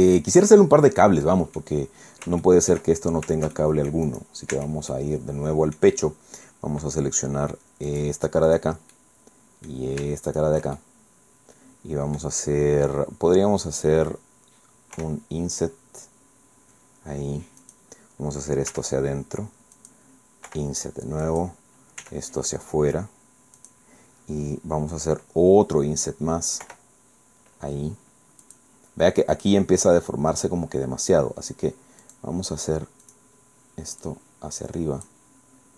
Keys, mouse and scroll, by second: 1.3 middle click, 2.4 shift+middle click, 2.9 shift+scroll up 1, 3.5 shift+middle click, 4.5 shift+Tab, 4.9 shift+middle click, 5.1 click, 7.9 click, 8.5 right click, 8.9 click, 10.3 shift+right click, 10.7-12.4 shift+drag, 14.9 i, 17.6 click, 18.7 e, 19.7 click, 20.5 i, 21.3 click, 22.0 e, 23.6 click, 26.6 i, 28.5 click, 32.0 click, 33.1 click, 34.0-35.3 drag.